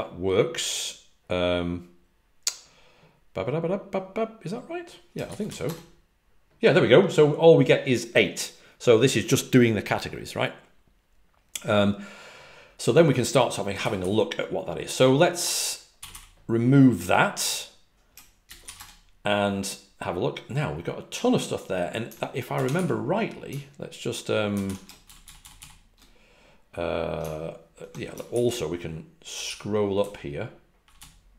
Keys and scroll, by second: 5.3-6.0 typing, 13.7 typing, 15.9 typing, 18.6 w, 25.1-25.5 typing, 29.9-30.7 typing.